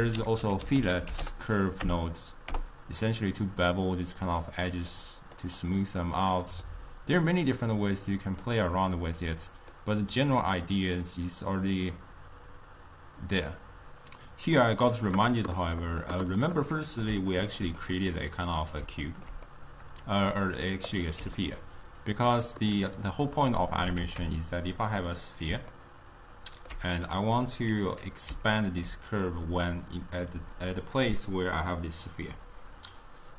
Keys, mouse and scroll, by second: 0.8 l, 4.3 click, 5.1-5.7 middle drag, 5.7-6.3 drag, 6.3-11.7 middle drag, 15.3-21.3 middle drag, 21.3 click, 22.6-24.1 middle drag, 24.1 shift+a, 25.9-31.7 ctrl+middle drag.